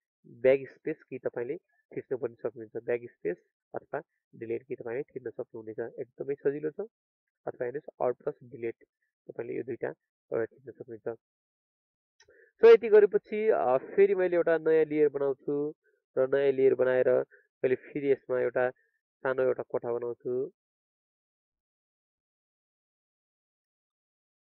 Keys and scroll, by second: 1.4 alt+BackSpace, 8.5 alt+Delete.